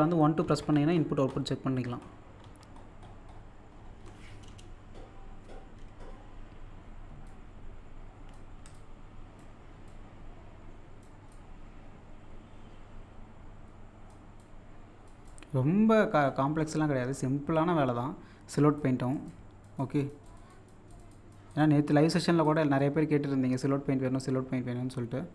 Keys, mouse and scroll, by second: 2.1-2.5 scroll up 1, 7.1 scroll up 1, 7.3-16.7 shift+drag, 9.8 typing, 16.7 middle click, 17.2 click, 17.8 middle click, 18.8 click, 21.9 middle click, 22.5-24.0 drag.